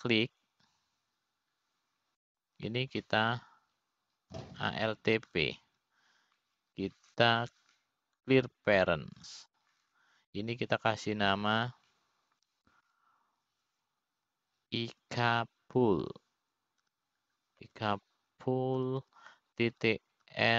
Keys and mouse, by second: 2.3-4.3 drag, 8.0 alt+p, 14.2 F2.